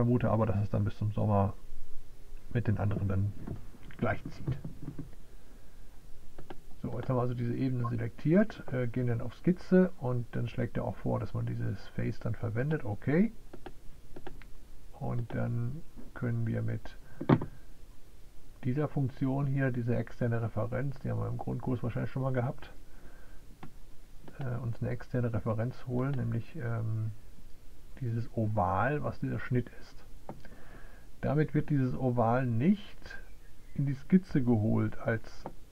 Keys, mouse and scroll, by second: 13.2 click, 15.1 click, 25.6 click.